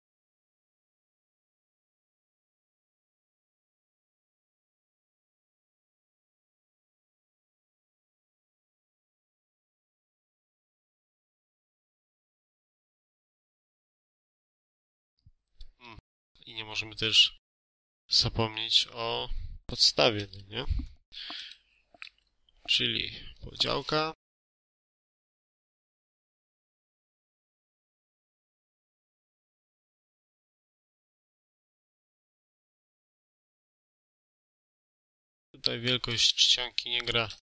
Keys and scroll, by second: 3.1 1, 3.2 8, 3.3 Return, 3.8 Escape, 8.6 5, 8.8 Return, 8.9 Escape, 9.8 2, 9.9 7, 10.0 Return, 10.1 Escape, 11.0 3, 11.1 4, 11.1 Return, 11.6 5, 11.6 Return, 11.7 Escape, 12.8 3, 12.9 6, 13.0 Return, 13.2 5, 13.3 Return, 13.4 Escape, 15.3 space, 19.9 1, 20.6 shift+;, 21.1 1, 21.8 ctrl+a, 25.2 5, 25.7 Return, 30.6 Escape, 31.3 Return, 32.3 space, 36.4 shift+a, 37.0 3, 37.4 ctrl+a.